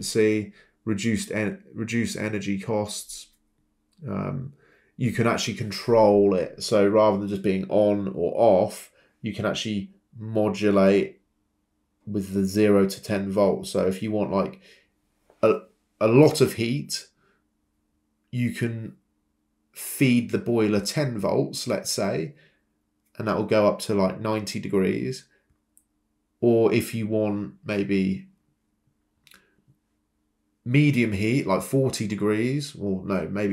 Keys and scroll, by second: 0.1 Escape, 8.3-12.8 typing, 18.9 Escape, 28.9 Escape.